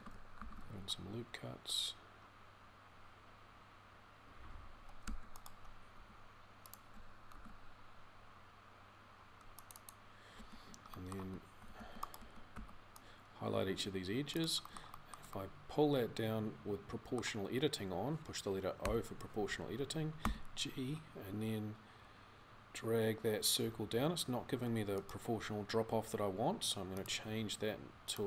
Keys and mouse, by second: 0.2 ctrl+r, 5.8 g, 7.1 ctrl+r, 10.2 a, 11.0 a, 11.4 c, 12.0 a, 19.9 g.